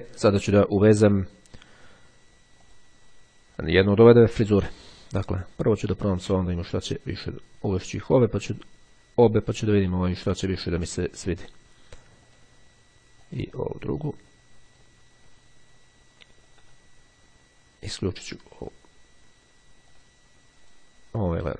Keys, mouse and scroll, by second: 2.6 click, 3.7 click, 6.9-8.9 drag, 12.4 click, 13.3-15.4 drag, 18.4 click, 20.0-21.4 drag.